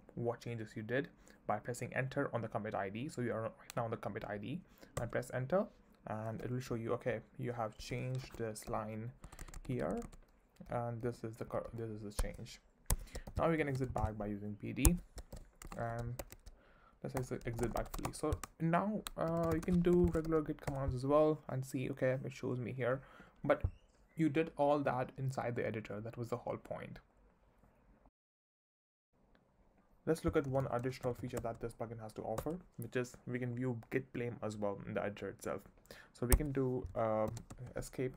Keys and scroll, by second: 5.0 Return, 6.4 j, 8.2 4, 8.6 j, 9.2 w, 10.5-20.7 typing, 12.2 Escape, 14.8 Escape, 17.1 Return.